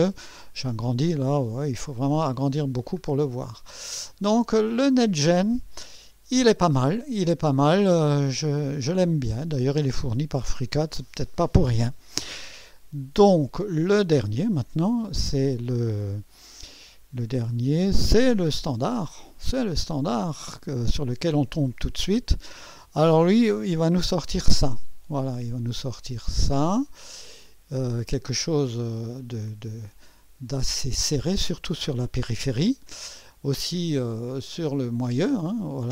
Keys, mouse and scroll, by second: 0.1 scroll up 1, 1.2-3.0 drag, 3.2-3.6 scroll down 2, 4.1 click, 5.2 right click, 7.3 scroll up 1, 7.7-9.6 right drag, 19.2 click, 24.7 click, 26.0 click, 26.7-27.1 scroll down 1, 27.4 scroll up 1, 28.3-29.2 right drag, 29.8-31.1 drag, 31.5 scroll up 1, 33.0 scroll down 1.